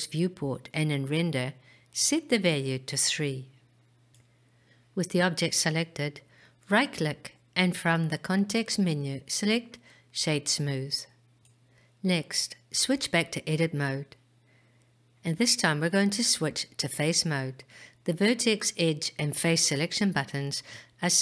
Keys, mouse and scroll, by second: 1.9 click, 2.2 click, 3.2 click, 7.0 right click, 14.7-15.8 drag.